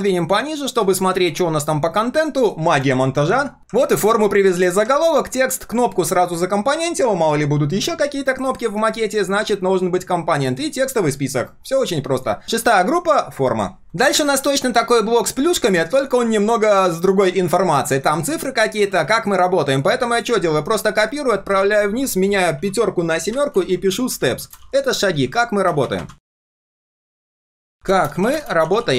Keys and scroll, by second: 3.6 ctrl+v, 5.8 ctrl+shift+3, 8.1 ctrl+shift+3, 12.4 ctrl+[, 21.2 ctrl+shift+[, 21.6 ctrl+r.